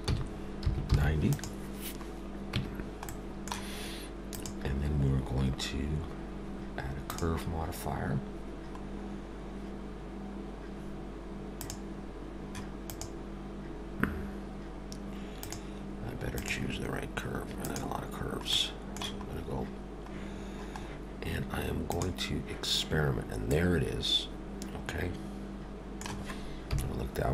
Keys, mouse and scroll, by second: 2.5 Tab, 3.1 middle click, 4.3 click, 11.5 click, 12.9 click, 16.3 click, 18.5 middle click, 20.3-21.5 scroll up 3, 21.8 click, 23.5 middle click, 26.7 KP_7.